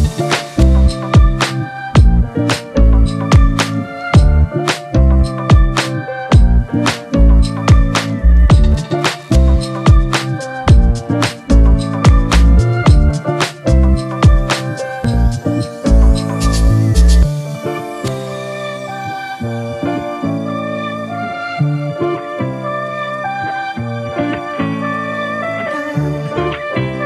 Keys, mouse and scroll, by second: 4.7 double click, 7.6 double click.